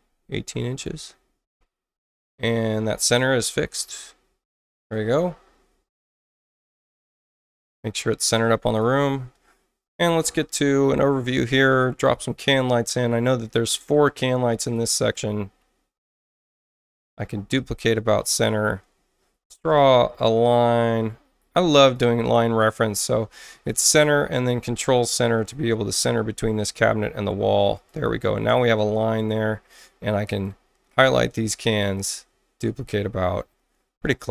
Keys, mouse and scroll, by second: 0.4-1.2 typing, 3.5 click, 4.8 click, 8.2 i, 8.6 click, 13.4 click, 13.9 space, 14.6 click, 15.1 ctrl+alt+c, 16.5 click, 21.0 click, 21.8 click, 23.5 i, 24.2 ctrl+i, 25.3 click, 26.4 click, 27.7 click, 28.4 space, 29.7 click, 30.9 ctrl+alt+c, 31.9 click, 34.0 space.